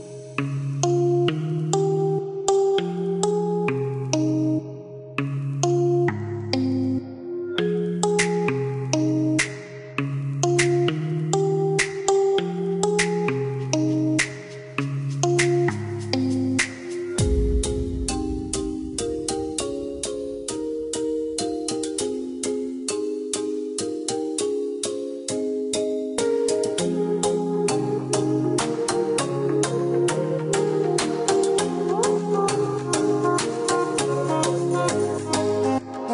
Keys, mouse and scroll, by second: 2.1 click, 4.9 click, 8.6 click, 9.2 click, 13.9 click, 16.5 space, 17.2 click, 18.3-20.6 scroll up 1, 21.6 click, 25.8 click, 28.9 click, 29.8 click, 30.2 Escape, 32.8 click.